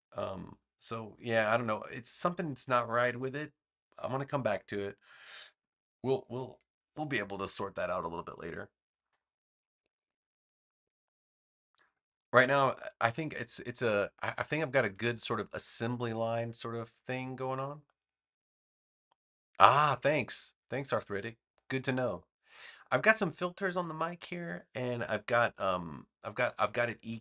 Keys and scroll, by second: 13.2 space.